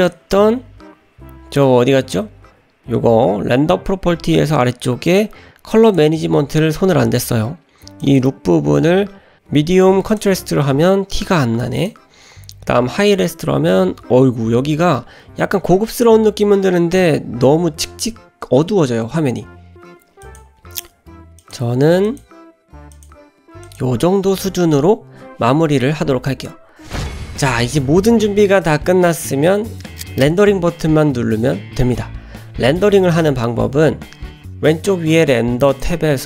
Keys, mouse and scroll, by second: 0.0 click, 5.1 click, 5.1 scroll down 4, 5.8 click, 8.0-10.2 drag, 11.8-13.1 drag, 19.7-20.5 drag, 21.4-22.3 drag, 22.9-23.8 drag, 35.7 click.